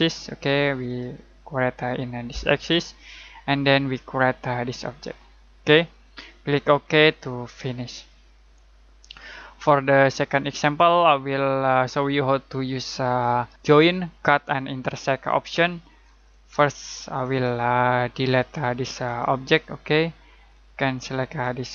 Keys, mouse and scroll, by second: 0.8 click, 4.4-5.1 scroll up 1, 5.1-6.4 scroll down 1, 7.4 click, 8.3 middle click, 17.2 click.